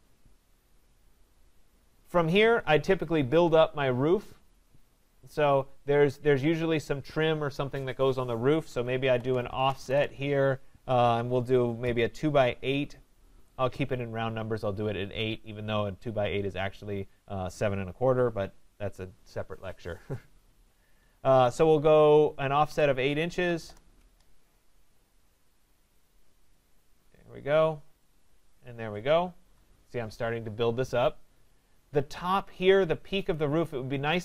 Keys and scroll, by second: 9.9 Return, 23.6 Return, 29.3 Escape.